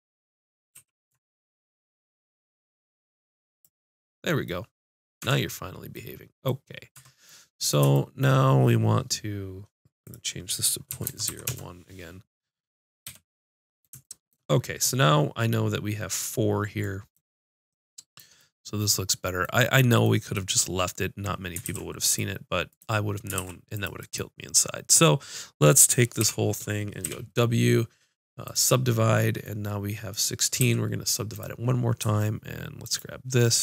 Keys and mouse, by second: 0.7 ctrl+e, 5.2 Tab, 6.9 Tab, 13.0 n, 21.6 ctrl+r, 23.3 ctrl+r, 23.3-26.1 drag, 26.2 l, 27.0 w, 30.6 w, 32.8-33.6 drag.